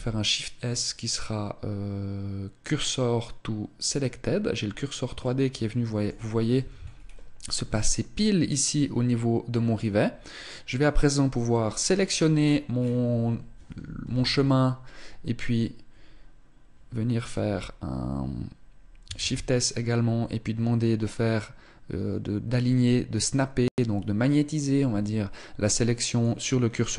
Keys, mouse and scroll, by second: 4.4-5.1 scroll up 2, 5.1 middle click, 6.3 z, 6.5-7.1 scroll up 3, 7.4 middle click, 10.4 right click, 11.2 middle click, 12.1-13.6 scroll down 7, 13.7 KP_1, 18.9 shift+s.